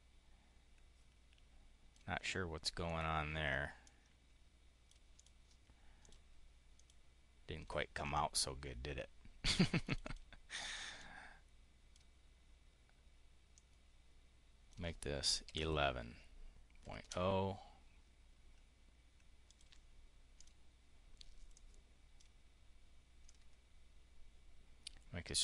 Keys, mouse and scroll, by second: 2.7 click, 3.7-4.8 drag, 5.0 click, 5.9 click, 6.5 click, 9.7 click, 10.8-11.9 drag, 13.4-14.7 drag, 15.3 1, 16.7 ., 19.3 click, 20.2 click, 21.4 click, 23.1-25.4 ctrl+drag.